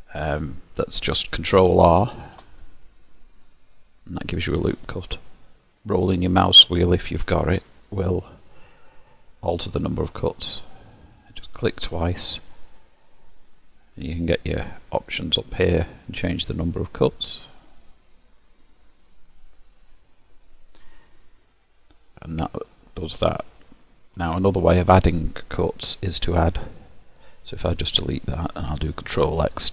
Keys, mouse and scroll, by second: 2.2 ctrl+r, 14.3 click, 15.1 click, 16.3 click, 17.8 click, 18.2 click, 18.6 scroll down 1, 18.7 click, 19.1 click, 21.5 click, 22.2 middle click, 27.2 alt+click.